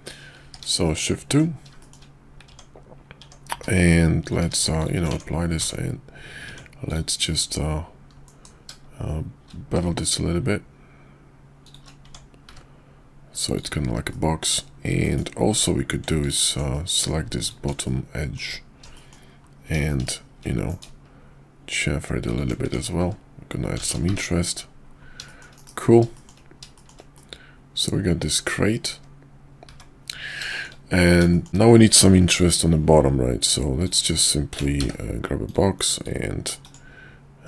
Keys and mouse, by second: 0.4 shift+2, 0.8-1.3 middle drag, 1.8 shift+middle drag, 2.5 Tab, 3.2 Tab, 3.5 q, 4.2 click, 4.4 q, 5.1 Tab, 5.6 Tab, 6.9-8.3 drag, 8.3 ctrl+b, 12.0 Tab, 12.4 `, 13.5 click, 14.1 middle click, 15.0 middle drag, 15.5 Tab, 16.2 alt+click, 16.7 middle click, 17.4 alt+shift+click, 17.8 middle click, 18.9 middle click, 19.8 KP_5, 20.7 ctrl+b, 22.6 Tab, 24.1 `, 25.2 shift+middle drag, 25.5 KP_5, 26.1 shift+middle click, 26.7 shift+middle click, 27.1-28.8 middle drag, 29.7 `, 30.5 shift+middle click, 31.3 middle click, 32.3 click, 33.4-33.8 drag, 34.8 d, 36.0-36.8 drag.